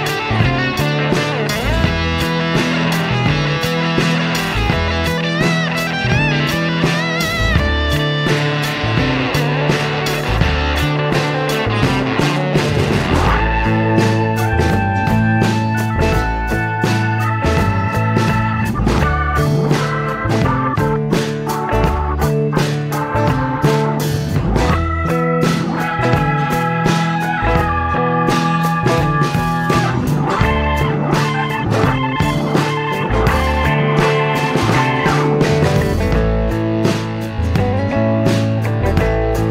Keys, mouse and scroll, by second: 1.5 click, 3.2 click, 3.9 click, 5.5 click, 6.3 click, 8.9-13.0 drag, 13.7 click, 13.8 space, 16.3 click, 17.4 click, 19.0-21.5 drag, 22.7-23.4 drag, 24.1 click, 24.6 click, 26.0-27.9 drag, 28.4 click, 29.8-30.4 drag, 31.2 click, 32.6 click, 33.4 click, 34.5 click, 35.6 click, 37.8 F7, 38.7 click.